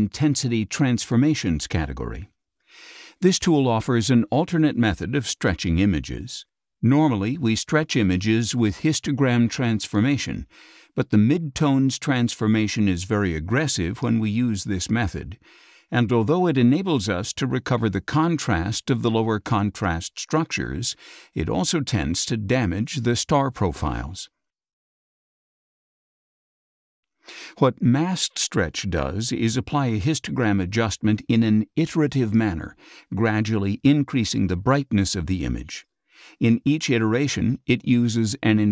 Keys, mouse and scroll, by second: 2.3-4.6 drag, 9.9-13.8 drag, 15.1-15.8 scroll down 4, 15.5 middle click, 19.8 space, 20.1 click, 22.9 scroll down 2, 23.5 scroll down 2, 24.7-26.2 scroll up 8, 27.6 click, 32.5 click, 36.4 click, 38.2-38.7 scroll down 4.